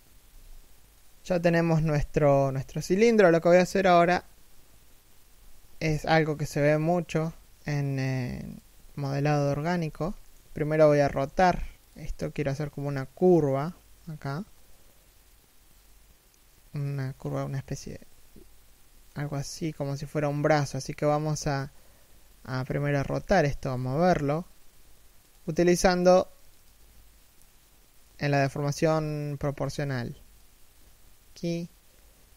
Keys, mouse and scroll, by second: 0.5 middle click, 1.2 1, 5.7 a, 8.1 alt+right click, 8.9 alt+shift+middle click, 10.6 r, 22.5 g, 28.3 g.